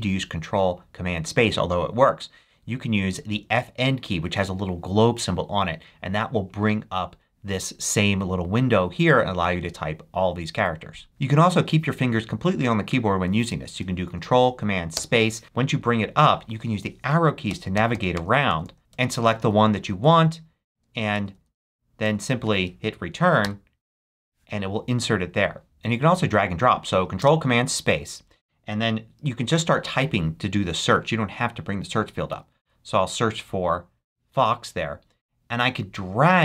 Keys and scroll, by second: 11.1 ↺, 14.9 ctrl+super+space, 17.4 Down, 18.1 Right, 18.8 Up, 18.9 Down, 20.1 Up, 20.7 Right, 21.1 Down, 22.0 Right, 23.4 Return, 27.1 ctrl+super+space, 31.7-33.1 typing.